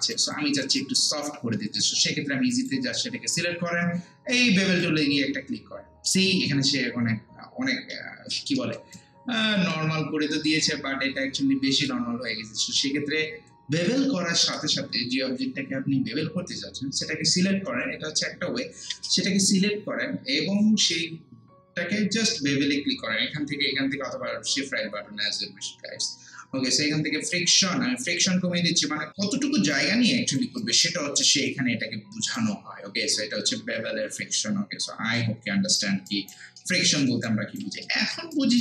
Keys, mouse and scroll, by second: 0.3 alt+click, 0.8 alt+right click, 1.6 alt+middle click, 2.5 click, 4.7 click, 7.2 scroll down 1, 8.4 scroll up 1, 8.6 alt+middle click, 8.9 alt+right click, 9.7-18.5 alt+drag, 27.3-29.1 drag, 29.1 alt+right click, 30.1 alt+click, 30.6 alt+right click, 31.0 alt+click, 31.5-33.9 alt+right drag, 33.9 ctrl+space, 34.5 scroll down 1, 34.7 scroll up 1, 35.2 alt+right click, 36.6 alt+middle click, 37.3 alt+right click, 37.9 alt+middle click, 38.4 alt+right click.